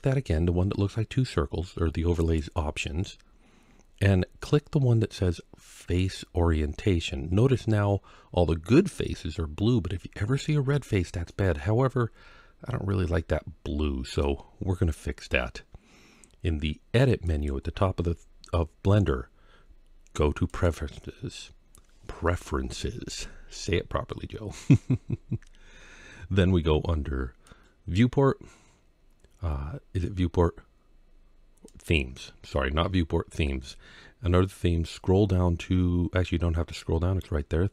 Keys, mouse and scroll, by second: 2.0-7.1 drag, 11.1-14.0 middle drag, 17.1-20.6 drag.